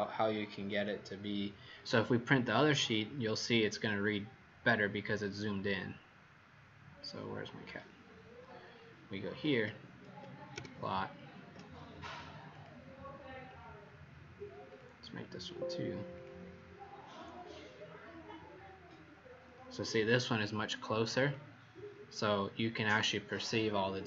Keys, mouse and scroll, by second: 10.5 ctrl+p, 12.4 click, 15.3 click, 16.0 click.